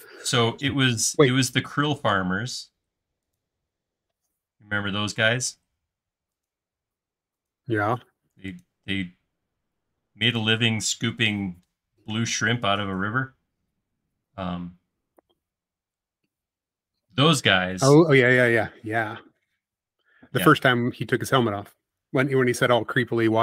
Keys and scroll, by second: 13.8 e, 20.1 super+z, 20.9 space.